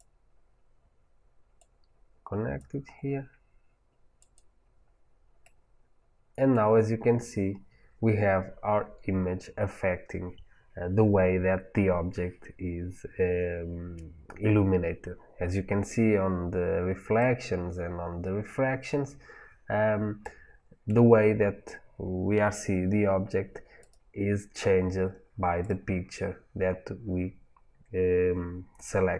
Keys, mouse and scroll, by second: 1.4-4.2 drag, 5.3 middle click, 6.6 middle click, 6.8 scroll up 2, 7.3 middle click, 7.3-7.9 scroll up 1, 8.5-21.7 middle drag, 8.5-9.1 scroll up 1, 23.7 click, 24.5 scroll down 1, 25.5 click.